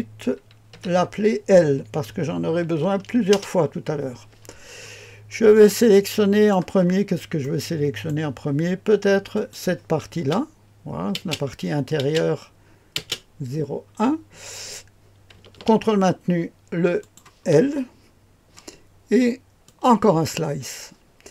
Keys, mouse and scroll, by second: 0.7 F2, 2.6 shift+l, 3.3 Return, 4.8-5.5 scroll up 1, 5.5-6.8 drag, 6.8-8.1 scroll up 1, 6.8 typing, 7.4 middle click, 8.1 right click, 9.3 click, 10.1 space, 11.1 space, 12.0 space, 12.9 space, 17.0 ctrl+click, 19.6 click.